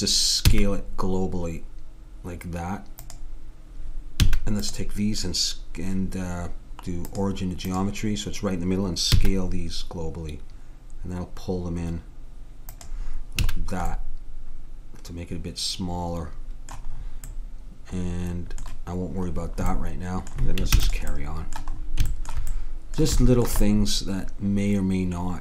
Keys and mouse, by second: 0.5 s, 4.2 a, 4.7-6.4 drag, 7.1-8.8 drag, 9.1 s, 13.4 a, 14.0-16.1 middle drag, 20.8 ctrl+s, 24.8 middle click.